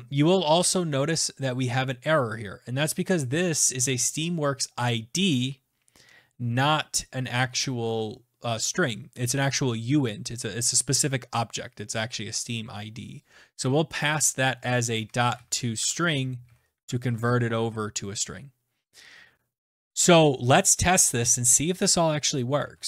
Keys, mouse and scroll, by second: 14.0 click, 14.8-16.7 typing, 22.3 alt+Tab.